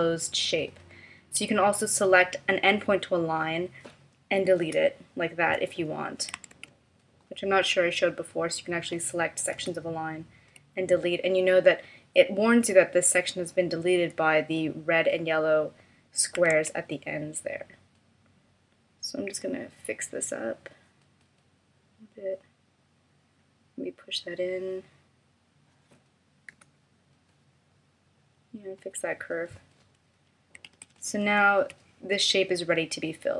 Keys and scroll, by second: 4.6 BackSpace, 6.5 super+z, 9.6 BackSpace, 16.5 super+z, 26.6 BackSpace, 30.7 super+-.